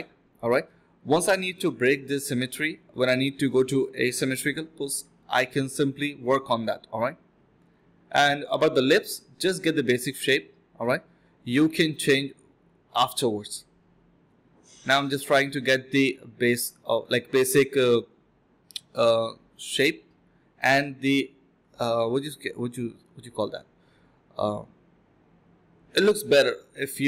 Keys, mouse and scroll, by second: 0.1 double click, 0.4 typing, 0.6 double click, 1.6 double click, 2.6 alt+click, 2.8 alt+click, 3.6 double click, 3.8 alt+click, 4.0 alt+click, 4.2 f, 4.5 double click, 4.8 alt+click, 5.0 alt+click, 7.3 ctrl+b, 9.3 double click, 11.7-13.1 typing, 14.4 typing, 15.5-16.3 typing, 19.0 typing, 20.3-21.1 typing, 22.4 alt+click, 22.7 alt+click, 23.0 f, 23.7 alt+click, 23.9 alt+click, 24.1 alt+click, 24.5 alt+click, 24.8 alt+click, 25.0 1, 26.2 alt+click, 26.7 ctrl+b.